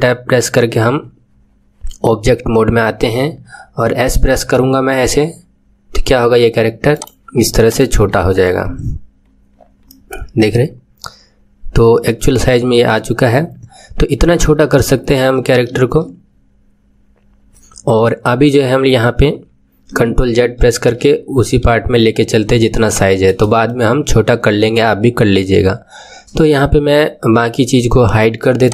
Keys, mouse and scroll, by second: 3.8 s, 7.6-8.0 drag, 8.0 KP_1, 8.6-9.4 scroll up 10, 9.5-9.8 scroll down 1, 9.8-12.8 middle drag, 13.0-15.6 middle drag, 15.6 KP_1, 20.4 ctrl+z, 21.1 ctrl+z, 21.8-23.6 scroll down 6, 23.6-27.4 shift+middle drag, 28.6 click.